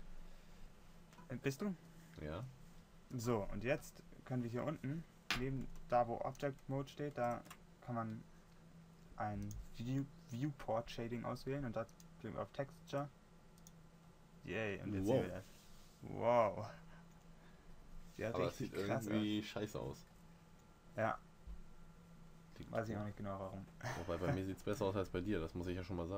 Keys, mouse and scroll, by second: 15.3-16.4 middle drag, 17.3 middle click, 18.3 middle drag.